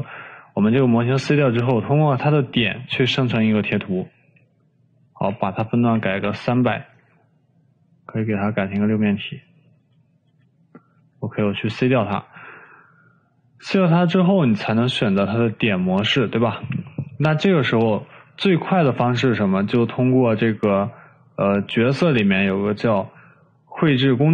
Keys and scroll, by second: 5.2-6.1 typing, 6.4 Return, 10.3-11.7 typing.